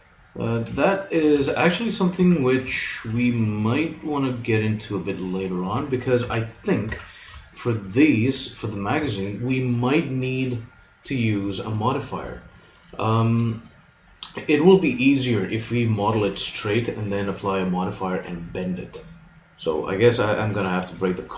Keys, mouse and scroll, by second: 1.4 a, 2.2 a, 6.3 KP_3, 6.9 z.